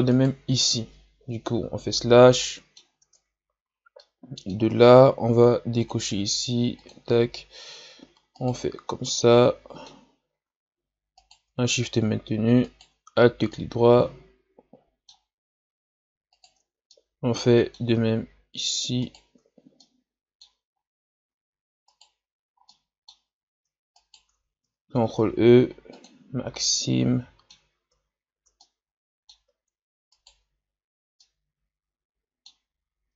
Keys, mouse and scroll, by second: 0.1 right click, 1.5 KP_Divide, 2.2 scroll down 1, 2.4 middle click, 3.0 Tab, 3.6-4.0 scroll up 1, 4.0-5.8 middle drag, 5.8 click, 6.8-8.4 drag, 8.4 alt+right click, 9.0-11.2 middle drag, 11.2 alt+shift+right click, 12.6 alt+shift+right click, 13.5-16.3 middle drag, 16.3 alt+shift+right click, 16.9-19.0 middle drag, 19.0 alt+shift+right click, 19.8-20.8 middle drag, 20.8 scroll up 1, 21.9 alt+shift+right click, 22.6-24.0 middle drag, 24.0 alt+shift+right click, 25.1 ctrl+e, 26.5-30.1 middle drag, 30.1 alt+shift+right click, 31.2-33.1 middle drag.